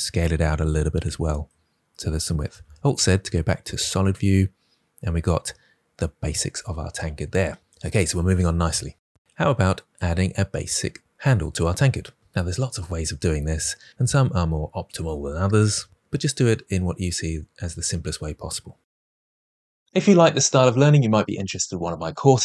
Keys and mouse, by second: 0.5 click, 2.5 alt+z.